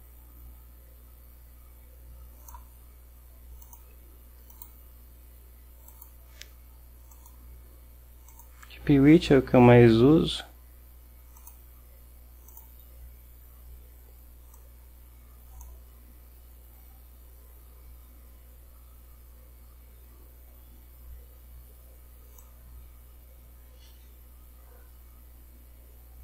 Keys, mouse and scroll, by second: 3.7 click, 4.7 click, 6.0 click, 7.2 click, 8.4 click, 11.5 click, 12.6 click, 14.6-15.9 drag, 22.5-26.2 drag.